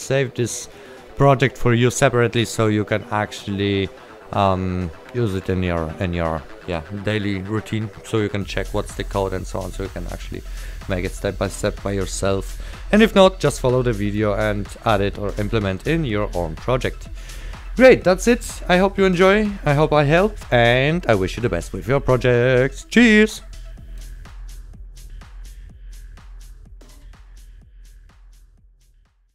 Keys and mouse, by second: 10.4 click, 15.6 right click.